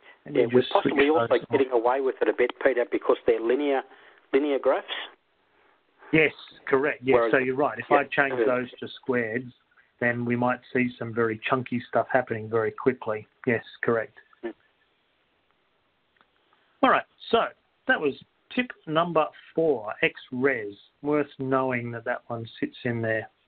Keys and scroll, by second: 10.5 Down, 10.5 3, 17.1 Down.